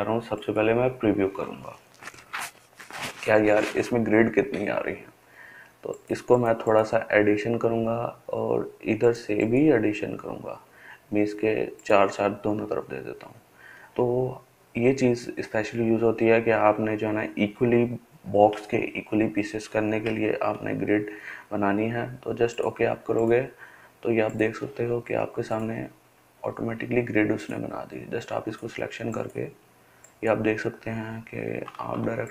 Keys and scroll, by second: 31.6 ctrl+z.